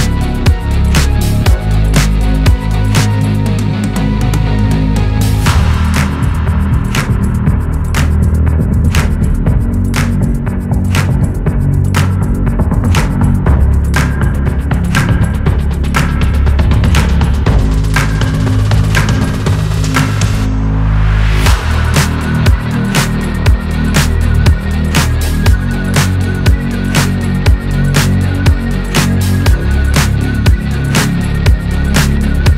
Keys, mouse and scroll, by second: 0.4-1.8 shift+drag, 2.4 m, 4.8-6.4 drag, 8.4 middle click, 9.0 click, 9.9 middle click, 10.2 KP_3, 11.8 scroll down 1, 12.1 Tab, 12.3 Tab, 12.4-12.9 scroll up 6, 12.9-15.8 drag, 15.8 s, 17.7 click, 17.9 Tab, 18.1 click, 18.4 g, 19.0 r, 20.7 Tab, 20.9 Tab, 21.0 click, 21.3 g, 22.5 Tab, 22.6 click, 22.7 scroll down 1, 22.9 shift+middle click, 23.2-24.2 scroll up 1, 24.4 click, 24.6-24.9 scroll up 2, 24.9 Tab, 25.1 click, 25.3 g, 26.7 scroll down 2, 26.9 shift+middle click, 27.3 click, 28.1 Tab, 28.4 s, 29.8 Tab, 30.0 Tab, 30.1 click, 30.2 scroll down 2, 30.3 middle click, 30.7-31.4 scroll up 1, 31.4 ctrl+z, 31.6 ctrl+z, 32.0 Tab, 32.2 click.